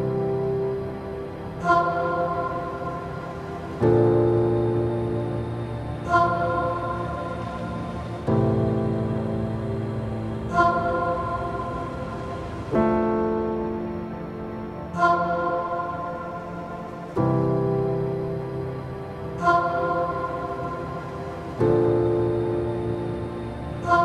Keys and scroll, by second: 6.9 ctrl+-, 18.4 u, 22.5 ctrl+v.